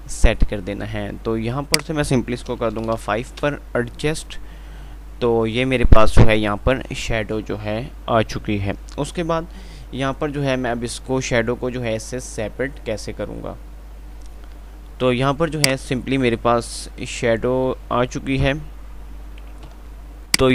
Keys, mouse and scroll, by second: 2.3 click, 2.3-2.7 typing, 15.7 click, 15.7 typing, 20.1 click, 20.1 typing.